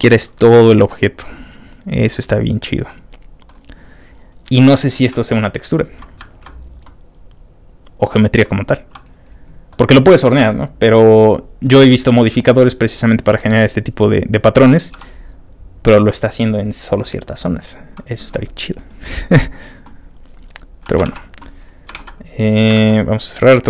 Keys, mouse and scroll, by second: 0.2 ctrl+middle click, 0.3 scroll up 2, 0.9-2.1 ctrl+middle drag, 0.9 scroll up 2, 2.8 middle click, 5.1 middle click, 5.1-5.5 scroll down 2, 5.4 ctrl+middle click, 5.8 ctrl+middle click, 5.8 ctrl+middle click, 5.8 ctrl+scroll up 1, 6.2 ctrl+middle click, 6.4-6.8 ctrl+scroll down 1, 6.8-8.0 ctrl+middle drag, 7.3 scroll down 1, 8.4-9.7 middle drag, 20.3 scroll down 2, 21.1 ctrl+w, 21.6 middle click, 21.7 scroll down 1, 21.9 ctrl+w.